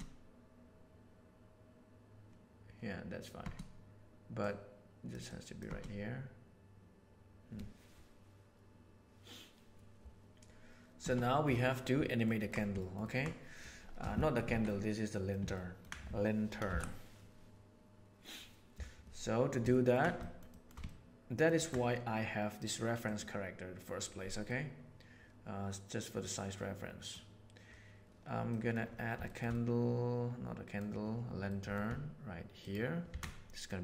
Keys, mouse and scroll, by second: 3.4 space, 4.4 right click, 5.2-5.6 right drag, 5.6 space, 11.0 space, 12.1 ctrl+middle click, 12.8 ctrl+middle click, 13.1 ctrl+middle drag, 14.1 shift+middle click, 14.5 alt+a, 14.6-15.3 middle drag, 15.5 middle drag, 16.6 shift+Left, 19.7 ctrl+middle drag, 20.2 shift+middle click, 20.5 shift+middle click, 20.8-21.4 ctrl+middle drag, 21.5 ctrl+middle click, 24.4-27.1 middle drag, 28.5 middle drag, 29.2 shift+middle click, 29.6-30.8 middle drag, 31.4 middle click, 33.1 shift+a.